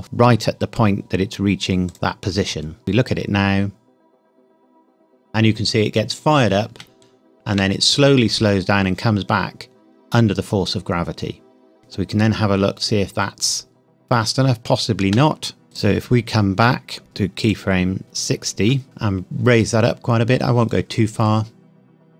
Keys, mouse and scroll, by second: 1.9 click, 2.4-2.8 scroll up 1, 2.8 space, 4.1-4.4 scroll down 1, 7.1 shift+middle click, 11.8 space, 15.0 space, 17.0-17.4 scroll up 1, 17.4 click, 18.8 g.